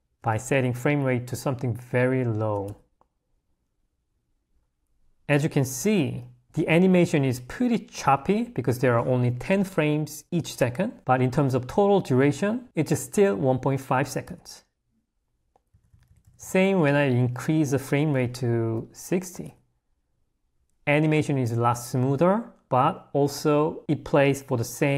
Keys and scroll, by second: 0.3 g, 2.8 Escape, 14.3 Escape, 16.5 l, 19.5 space, 19.5 Escape.